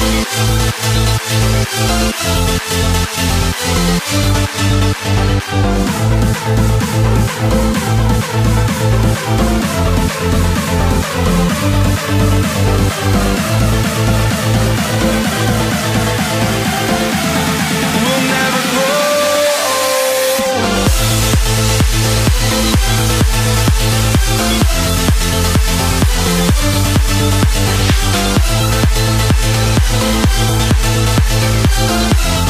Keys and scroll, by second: 0.3 ctrl+t, 3.0 ctrl+z, 10.8 ctrl+t, 12.2 ctrl+t, 13.7 ctrl+z, 14.0 ctrl+t, 14.2 ctrl+z, 14.8 ctrl+t, 17.3 alt+BackSpace, 19.6 ctrl+t, 21.8 ctrl+t, 24.8 ctrl+t, 25.2 ctrl+t.